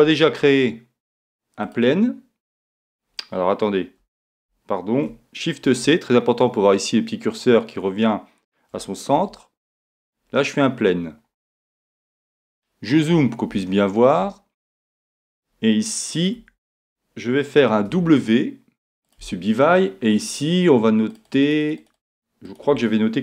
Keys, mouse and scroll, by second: 0.4 shift+a, 4.3 super+z, 5.8 shift+c, 9.1 shift+a, 11.1-15.4 middle drag, 16.4 Tab, 17.8 w, 21.1-23.2 drag.